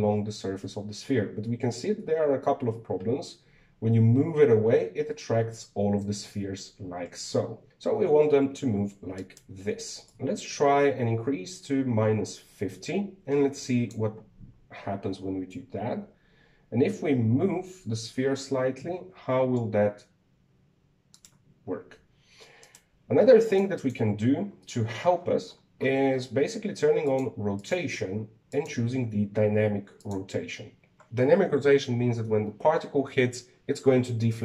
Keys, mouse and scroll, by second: 7.7 g, 10.8-13.9 drag, 16.8 g, 23.4 right click, 24.2 click, 24.6 click, 25.6-27.8 scroll up 22, 27.8 click, 28.3-29.4 drag, 30.8 click.